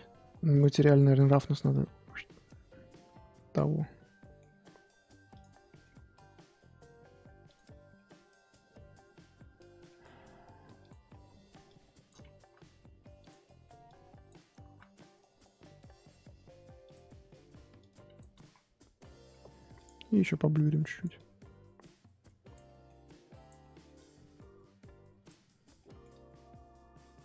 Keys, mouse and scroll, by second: 1.8-3.8 drag, 3.8 middle click, 4.4 scroll down 1, 4.5-5.4 scroll up 3, 5.4 click, 5.7 middle click, 5.9-6.7 scroll up 3, 6.7-7.9 scroll up 1, 7.9-10.9 middle drag, 10.9 click, 11.6 click, 12.4 ctrl+z, 13.8 click, 14.6 ctrl+z, 16.7 scroll up 1, 16.9 click, 17.8 click, 18.4 ctrl+z, 19.8-22.6 drag, 22.6 middle click, 23.0 click, 23.6 middle click, 24.0-25.8 drag, 25.8 middle click, 26.1-27.2 drag.